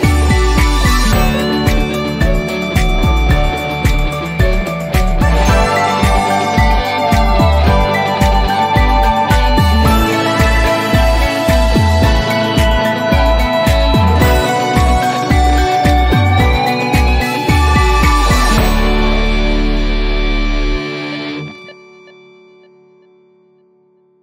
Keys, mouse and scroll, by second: 2.1 click, 3.0 typing, 5.8-7.0 typing, 9.6 click, 11.7 click, 13.5 click.